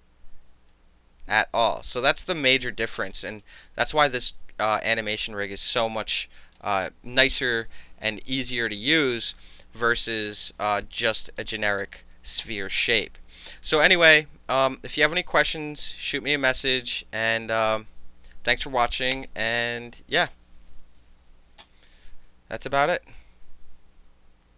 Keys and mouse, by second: 0.0-2.0 drag, 2.3 ctrl+z, 2.9 alt+drag, 3.4 click, 4.0 alt+click, 5.6 alt+click, 6.3-6.6 alt+right drag, 11.3 click.